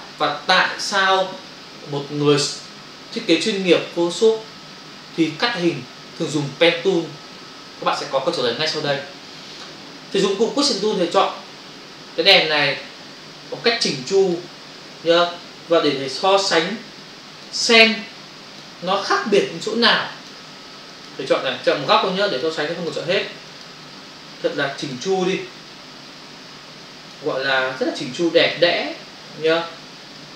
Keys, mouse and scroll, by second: 11.2 click, 13.3 [, 14.1 click, 14.8 click, 16.2 click, 17.0 click, 18.0 click, 19.3 ctrl+space, 19.6 ctrl+click, 19.7 ctrl+space, 20.4 space, 20.9 click, 21.1 click, 21.8 click, 21.9 double click, 22.2 click, 22.9 click, 23.7 click, 23.8 double click, 24.5 click, 25.7 click, 27.8 click, 29.0 click, 30.1 click.